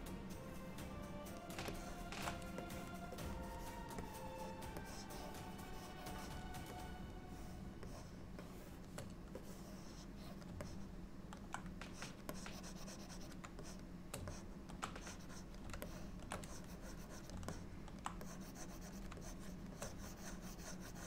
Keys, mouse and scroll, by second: 1.8 shift+middle click, 2.7 click, 3.3 click, 4.1 click, 4.9 click, 6.8 shift+click, 7.3 shift+click, 7.9 shift+click, 8.5 shift+click, 9.5 click, 10.7 middle click, 12.0 click, 12.4 click, 13.7 shift+click, 14.1 shift+click, 14.4 middle click, 15.1 click, 15.9 shift+middle click, 16.5 click, 17.6 middle click, 18.3 click, 19.3 shift+click, 19.6 shift+click, 19.8 click.